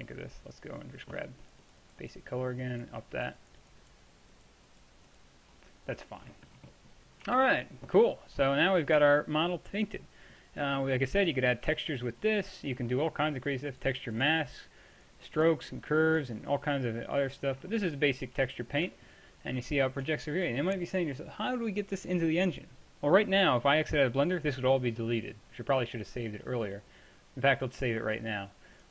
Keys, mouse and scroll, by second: 5.6-6.9 middle drag, 7.3 t, 11.7 t, 13.7 click, 14.3-15.3 middle drag, 15.3-17.8 drag, 17.8-18.3 middle drag, 18.3 t, 27.8-28.9 drag.